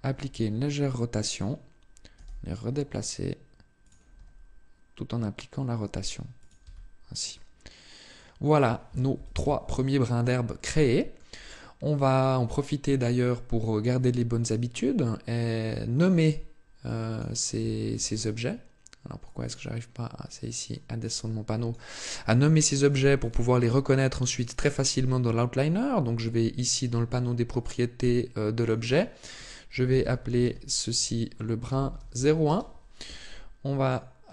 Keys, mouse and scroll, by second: 1.2 click, 2.0 g, 3.7 click, 3.9 r, 6.2 click, 6.4 Tab, 7.1 middle click, 8.9 KP_7, 9.8-10.4 scroll down 1, 10.4 shift+middle click, 12.0 scroll down 1, 13.7 click, 15.4 click, 16.6 click, 17.4 Tab, 17.7 Tab, 19.0 click, 20.5 click, 22.6 click, 23.0 click, 23.4 click, 23.7 click, 24.0 click, 24.2 click, 27.4 click, 28.4 click, 33.6 click, 34.2 click.